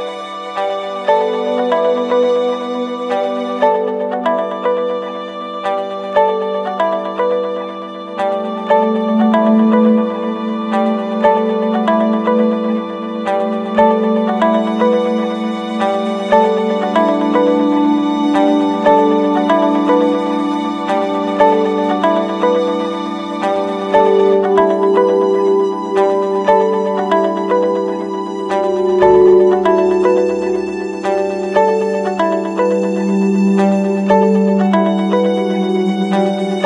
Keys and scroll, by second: 0.7 ctrl+-, 3.2 ctrl+=, 3.5 ctrl+space, 10.0 ctrl+z, 12.7 Return, 13.6 ctrl+z, 19.4 ctrl+z, 27.3 ctrl+-, 27.9 ctrl+=, 30.2 ctrl+z, 35.9 ctrl+z.